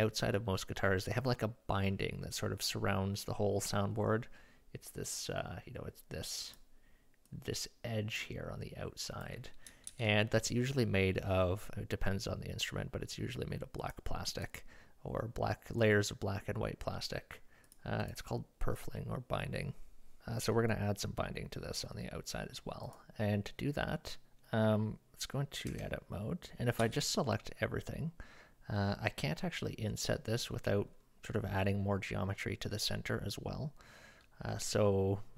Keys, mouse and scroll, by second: 7.3-9.3 drag, 9.9 ctrl+z, 13.8 click, 14.4 click, 17.7 click, 25.7 Tab, 26.8 a, 29.9 middle click.